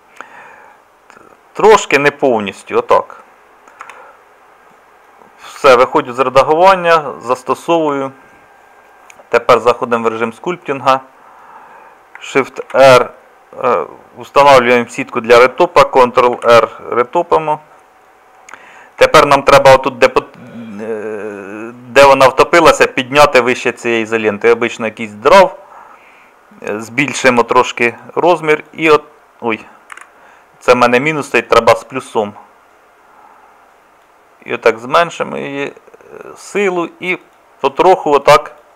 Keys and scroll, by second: 3.8 Tab, 5.6 Tab.